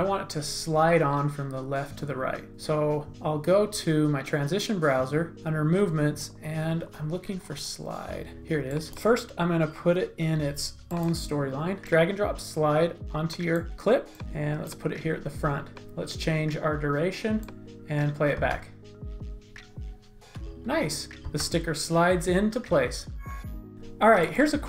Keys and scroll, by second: 18.4 space, 21.2 space.